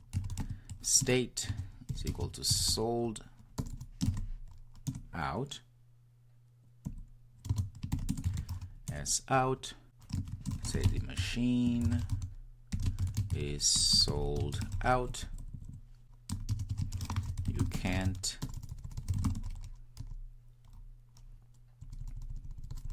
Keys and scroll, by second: 1.9 Return.